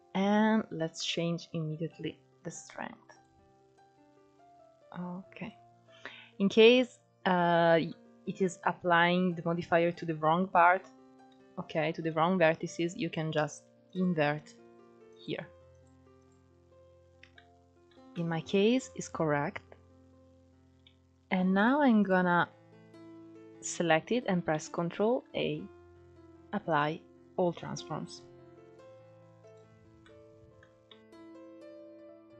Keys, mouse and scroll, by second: 1.1-4.1 drag, 4.6-7.2 drag, 7.2-7.6 scroll up 2, 7.6-11.8 middle drag, 12.2-14.8 middle drag, 14.8 click, 16.0 click, 16.6 click, 17.1 click, 18.2-19.6 middle drag, 19.6-21.2 scroll up 1, 21.2-21.7 scroll down 1, 21.7-22.4 scroll down 1, 22.4-23.0 drag, 24.6-25.9 middle drag, 25.9 ctrl+a, 29.0-30.9 drag, 30.9-31.4 middle drag, 31.4 Tab, 31.8 middle click, 31.9 Tab, 32.1 middle click.